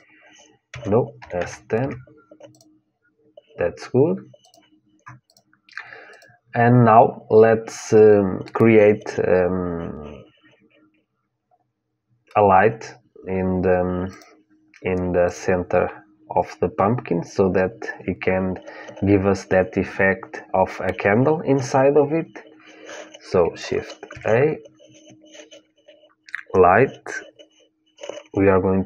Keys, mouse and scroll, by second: 0.4 s, 2.2-7.8 drag, 11.2-13.9 middle drag, 13.9-28.8 drag.